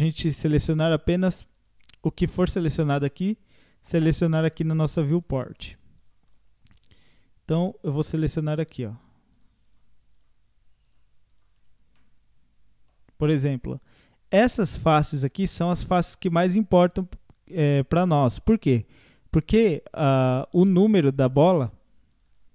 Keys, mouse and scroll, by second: 8.6-12.0 shift+drag, 12.0 middle click, 12.9 scroll down 1, 14.0-20.6 middle drag.